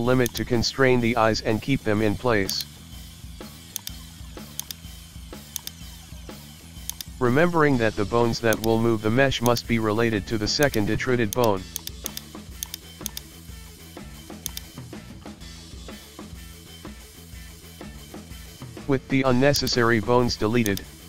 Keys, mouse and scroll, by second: 1.0 shift+middle click, 2.5-3.8 drag, 4.6-6.0 drag, 8.5 click, 10.6 click, 11.8 right click, 12.0 click, 12.8 shift+middle click, 13.1 click, 15.7-16.2 middle drag, 16.7-17.1 scroll up 1, 17.1 middle click, 17.7 KP_1, 17.9 shift+middle click, 18.4 scroll down 1, 18.6 shift+middle click, 18.8 scroll up 1, 19.6 right click, 20.1 g.